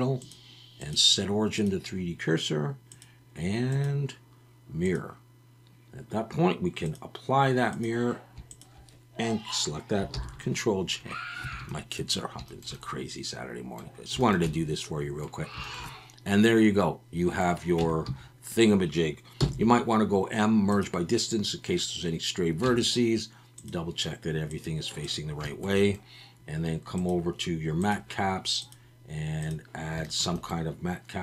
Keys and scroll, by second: 10.1 ctrl+j, 11.5 alt+a, 17.8 Tab, 18.1 a, 19.4 m, 22.7 Tab.